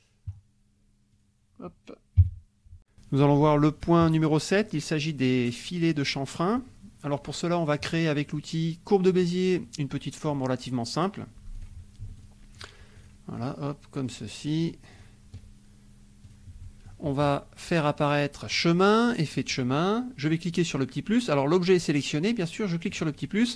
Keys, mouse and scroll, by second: 1.1 click, 2.2 KP_5, 9.1 click, 9.4-10.5 middle drag, 11.5 click, 12.2 ctrl+click, 12.5 ctrl+click, 13.0 ctrl+click, 13.4 ctrl+click, 14.1 ctrl+click, 14.6 ctrl+click, 14.9 ctrl+click, 16.2 click, 16.6 click, 18.6 click, 19.6 click, 22.9 click.